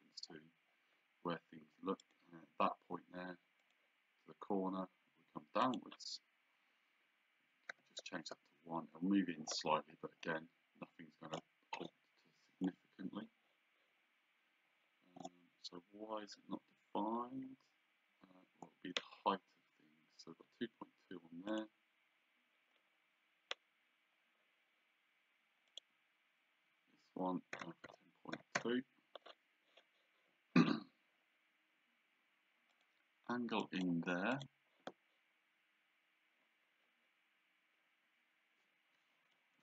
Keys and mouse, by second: 2.0 click, 3.6 click, 5.6 click, 7.7 KP_1, 8.2 Return, 21.5 click, 25.7 click, 27.5 KP_1, 27.6 KP_0, 27.9 KP_Decimal, 28.6 Return, 28.6 KP_Enter, 32.7 click, 39.4 Escape.